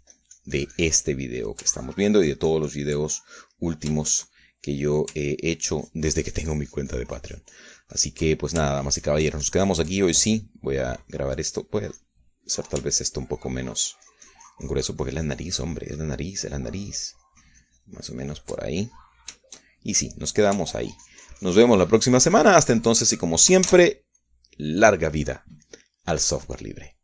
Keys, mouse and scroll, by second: 3.1 ctrl+middle click, 3.7-4.9 ctrl+drag, 4.9 ctrl+middle click, 5.9 ctrl+shift+middle click, 7.5-10.6 ctrl+drag, 10.7-12.3 ctrl+drag, 12.3-13.7 middle drag, 13.9 middle click, 14.9-20.9 ctrl+drag, 20.9-22.5 shift+middle drag, 22.7-24.8 ctrl+drag, 24.9 ctrl+middle click, 25.6 ctrl+s, 26.1 middle click.